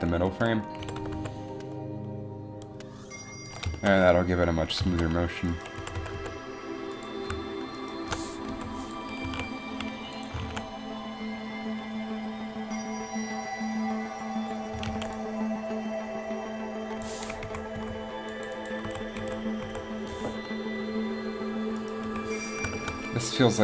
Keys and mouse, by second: 1.0 r, 5.7 right click, 6.0 r, 8.6 i, 9.4 a, 10.3 click, 10.5 alt+a, 15.1 alt+a, 17.6 Up, 17.9 Down, 19.0 Right, 19.4 Right, 19.8 Right, 22.1 KP_1.